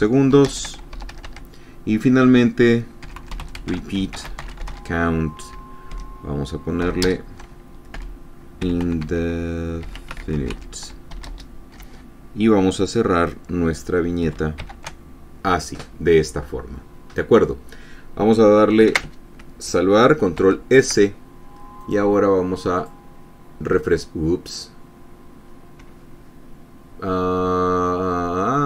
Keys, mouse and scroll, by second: 0.2 shift+s, 1.0 shift+space, 1.5 shift+Return, 1.6 shift+Tab, 3.3-6.5 typing, 7.6-11.8 typing, 15.1 shift+<, 20.9 ctrl+s, 22.3 click, 23.3 click.